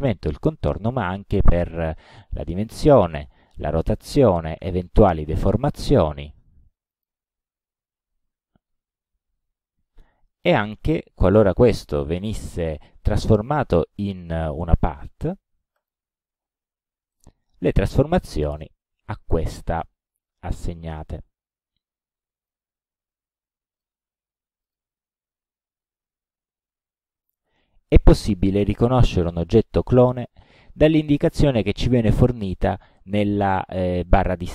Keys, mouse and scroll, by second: 1.0-1.8 drag, 2.4 click, 3.3-3.8 drag, 4.0 click, 5.1 click, 5.7-6.4 drag, 7.0 click, 8.0-8.5 drag, 9.0 click, 14.5 click, 15.8 click, 17.2 click, 18.7-19.9 drag, 20.7 click, 22.0 click, 23.8 click, 24.7 click, 29.7 click, 31.1 click.